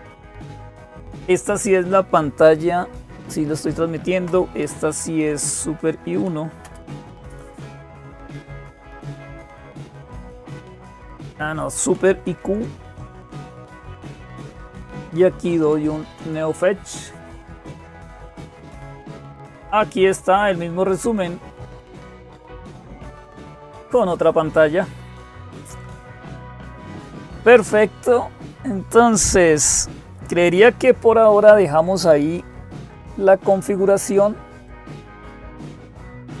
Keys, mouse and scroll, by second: 0.0-36.4 typing, 20.1 click, 34.5 click.